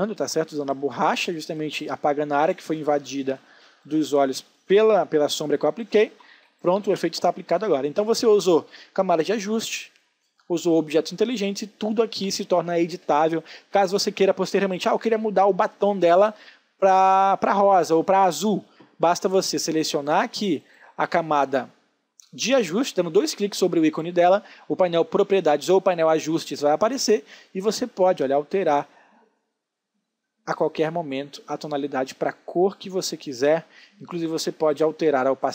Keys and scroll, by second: 4.9 space.